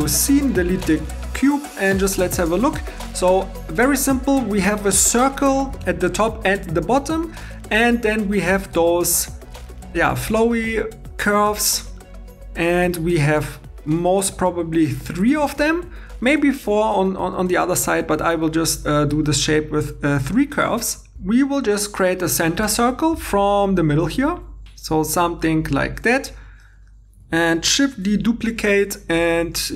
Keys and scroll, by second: 0.7 x, 24.2 shift+d, 28.0 shift+d.